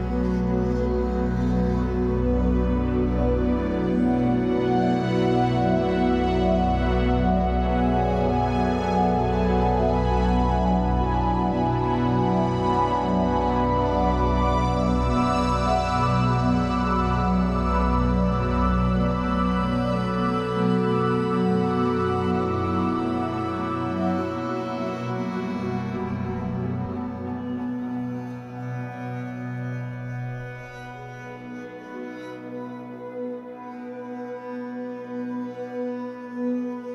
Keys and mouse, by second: 4.2 click, 5.4 click, 6.1-6.6 drag, 7.9 click, 8.8 click, 10.9 click, 12.0 click, 12.2 click, 14.0 click, 15.8 click, 16.5 click, 16.7 click, 18.8 click, 19.0 click, 20.7 click, 20.9 click, 22.3 click, 22.5 click, 26.3-30.9 drag, 31.8 Tab, 32.2-36.9 typing, 36.8 click.